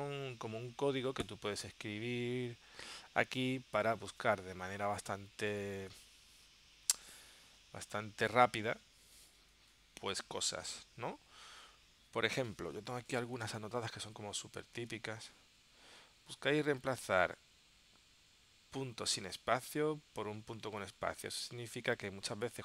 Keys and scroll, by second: 13.6 super+Tab, 22.1 super+Tab.